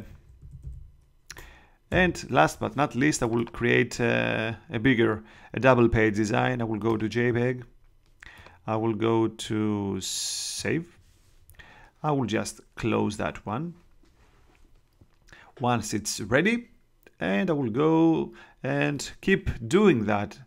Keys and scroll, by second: 0.3 Right, 1.2 BackSpace, 1.8 7.